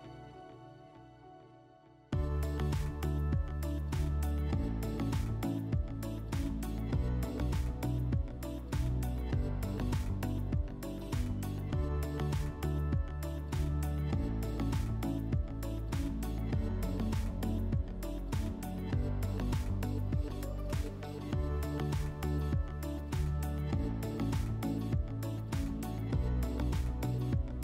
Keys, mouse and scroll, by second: 0.8 click, 1.3 click, 2.4 click, 3.3 click, 4.4 click, 6.2 click, 7.4 click, 7.6 click, 8.7-9.0 typing, 9.7 Tab, 9.8 Tab, 11.1 click, 11.3 click, 11.9 typing, 12.9 Return, 13.7 middle click, 15.4 alt+w, 16.8 alt+middle click, 20.9 click, 21.6 alt+middle click, 22.1 middle click, 24.1 middle click, 24.8 click, 25.4 alt+middle click, 27.3 click.